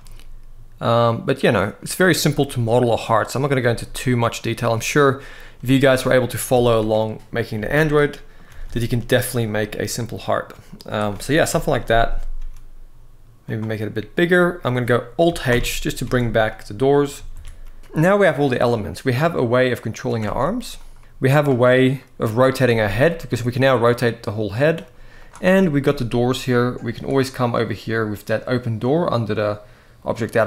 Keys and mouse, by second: 1.1 click, 2.3 click, 3.2 click, 3.4 g, 3.9 click, 5.3 z, 6.3 Tab, 7.3 alt+a, 7.6-8.1 middle drag, 8.3 ctrl+s, 8.4 ctrl+s, 8.6-9.0 middle drag, 9.3-10.2 middle drag, 10.7 click, 11.2 KP_1, 12.1 s, 15.2 alt+h, 15.9 alt+a, 16.2-16.7 middle drag, 16.9 ctrl+s, 17.1 ctrl+s, 17.5 middle click, 18.1 shift+middle click, 19.0 click, 20.0 ctrl+Tab, 20.5 click, 20.7 g, 21.0 ctrl+Tab, 21.7 middle drag, 22.4 r, 22.5 r, 24.5-24.9 right drag, 24.9 click, 26.4 click, 28.1-30.4 drag.